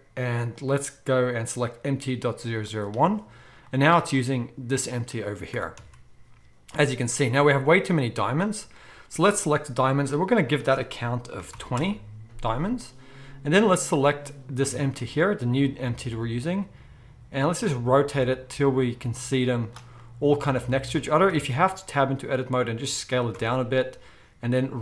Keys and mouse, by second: 0.6-4.8 drag, 4.8-7.7 middle drag, 5.5 r, 7.7 click, 7.8-10.4 middle drag, 10.4-13.9 drag, 13.9-23.0 middle drag, 14.7 r, 21.3 Tab, 22.2 s, 23.3 Tab.